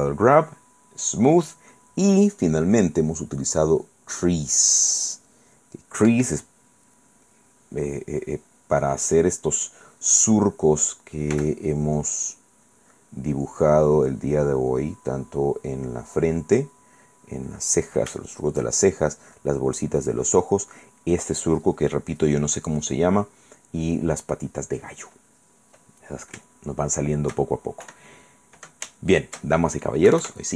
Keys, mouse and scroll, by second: 6.3 Escape, 9.0 click, 9.9 click, 11.5 f, 12.2 click, 12.5-15.3 drag, 15.6 click, 18.4 shift+click, 24.7 click, 26.8 shift+click, 27.2 shift+middle click, 28.0 KP_1, 29.1 shift+click, 30.3 KP_Subtract.